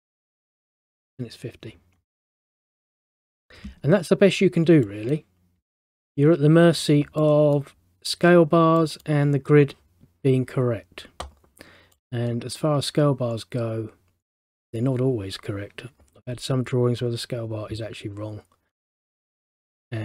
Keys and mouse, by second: 2.8 middle click, 5.0 middle click, 5.9 middle click, 7.3 middle click, 12.1 middle click, 19.2 middle click.